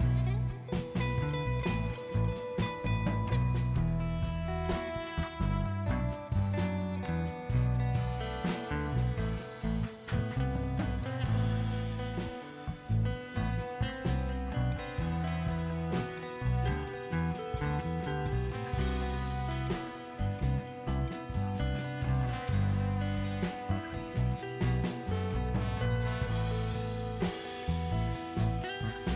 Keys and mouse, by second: 0.1 alt+click, 0.5 g, 1.6 alt+click, 2.2 alt+click, 2.5 g, 3.7 click, 4.0 alt+click, 4.3 g, 5.1 click, 5.9 alt+click, 6.5 g, 6.7 z, 7.3 g, 8.4 Tab, 8.8 z, 9.5 Tab, 9.8 ctrl+z, 9.9 ctrl+z, 10.1 ctrl+z, 10.2 ctrl+z, 10.6 ctrl+z, 10.9 click, 12.5 g, 13.3 middle click, 14.2 click, 14.4 g, 14.6 click, 15.0 click, 15.9 g, 16.1 click, 16.3 z, 16.9 z, 17.2 g, 18.4 click, 18.7 z, 19.7 z, 20.0 ctrl+b, 21.2 z, 21.8 g, 22.2 click, 22.5 Tab, 22.6 Tab, 22.7 z, 24.3 alt+click, 24.7 alt+click, 25.1 ctrl+b, 25.5 click, 25.6 space, 25.8 space, 26.0 click, 26.6 ctrl+b, 26.9 Tab.